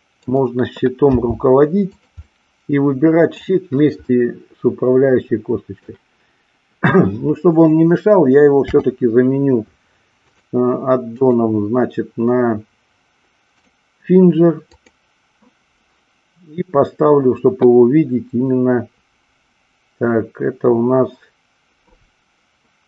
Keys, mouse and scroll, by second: 0.2 click, 1.1 g, 2.0 click, 2.4-3.2 middle drag, 4.1-5.7 middle drag, 8.6 n, 11.1-13.7 drag, 14.7 click.